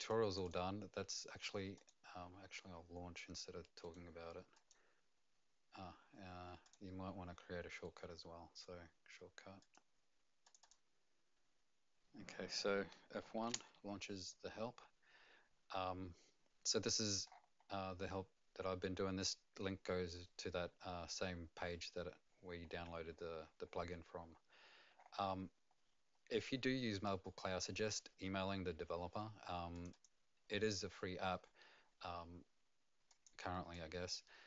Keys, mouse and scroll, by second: 0.1 click, 0.4 click, 3.8 right click, 4.5 click, 6.6 click, 7.8 right click, 9.6 click, 10.4 click, 13.4 F1, 15.8-16.2 scroll down 1, 17.0 F1, 17.0 click, 17.0 scroll down 5, 17.2-20.6 scroll up 6, 21.4-21.9 scroll down 2, 22.3-24.9 scroll down 29, 24.9-25.3 scroll up 4, 25.7-27.5 scroll up 2, 29.7 click, 29.9 click, 33.1 click, 33.7 click.